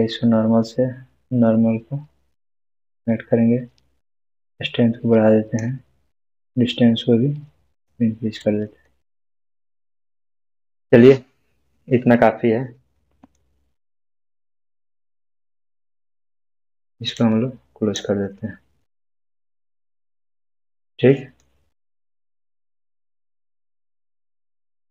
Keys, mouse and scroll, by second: 8.5-8.9 scroll down 1, 8.9-10.7 middle drag, 11.1 scroll up 1, 13.0-13.6 middle drag, 17.3-18.1 drag, 18.9-19.7 scroll down 1, 19.7-21.6 middle drag, 21.7-22.2 scroll down 1, 22.2-24.4 middle drag, 24.5-24.8 scroll up 1.